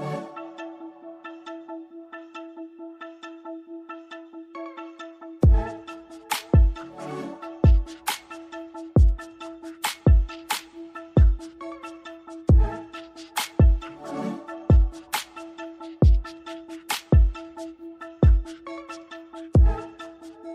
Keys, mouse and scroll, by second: 0.7 click, 7.0 typing, 8.0 typing, 9.3-14.1 typing, 15.4 click, 17.6 Left, 17.9 typing, 18.2 click.